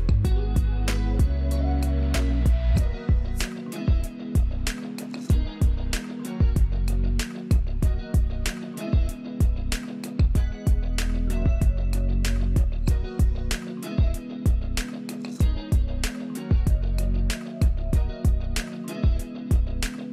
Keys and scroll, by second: 2.1 space, 5.5 ctrl+z, 11.3 alt+space, 12.2 alt+space, 16.6 space, 17.5 space, 17.8 z.